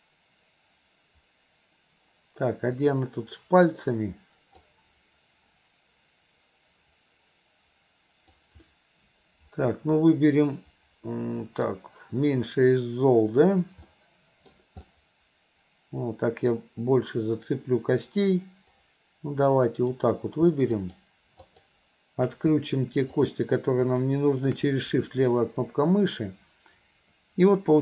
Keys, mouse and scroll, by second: 2.9 click, 4.7-8.5 drag, 8.7-11.7 middle drag, 14.0 middle click, 14.9-16.5 middle drag, 18.8-20.0 drag, 20.8 click, 21.4 click, 23.1 click, 23.8 click.